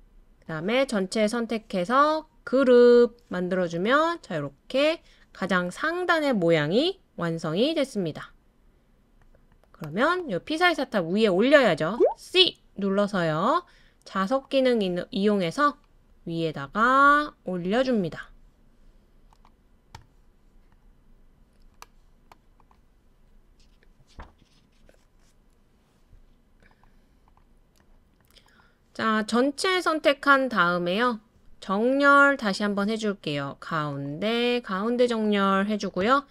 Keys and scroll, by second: 11.9 c.